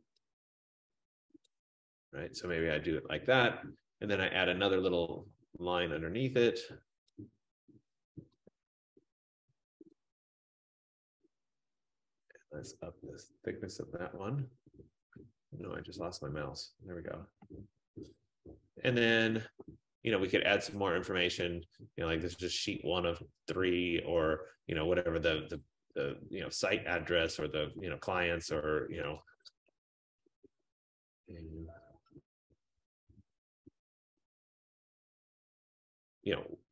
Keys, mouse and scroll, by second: 1.0 click, 1.5 click, 2.7 click, 4.9 click, 9.9 shift+click, 17.4 click, 17.7 click, 19.3 click, 21.6 click, 28.5 click, 29.2-36.7 typing.